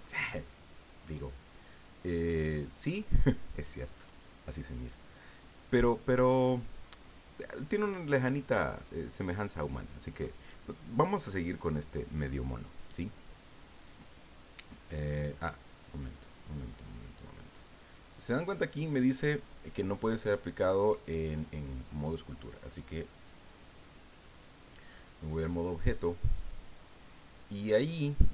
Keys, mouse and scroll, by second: 13.8 click, 17.9 click, 23.1 click, 24.4 click.